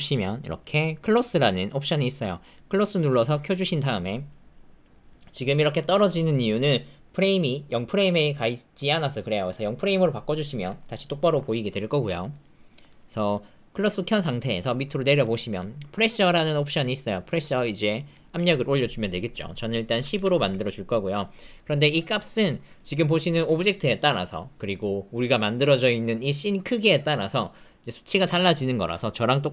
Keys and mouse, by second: 9.6 click, 12.4 middle click, 12.9 middle click, 14.4 middle click, 14.9 middle click, 15.3 middle click, 18.1 click, 19.4-20.5 drag.